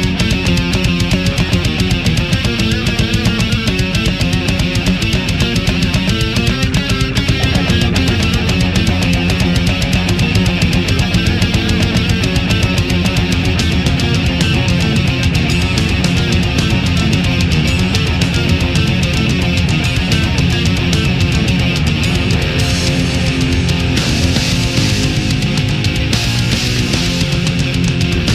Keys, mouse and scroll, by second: 3.0 Delete, 4.7 click, 5.8 scroll up 1, 6.4 scroll up 1, 7.9 click, 9.2 right click, 9.8 shift+right click, 10.4 shift+right click, 11.0 shift+right click, 11.6 shift+space, 12.8 f, 13.1 c, 13.4 e, 14.5 click, 15.6 a, 16.0 scroll down 1, 17.2 scroll up 1, 18.4-21.6 middle drag, 21.8 right click, 22.6-24.0 drag, 24.2 a, 25.4 right click, 25.9-27.0 drag, 27.6 right click.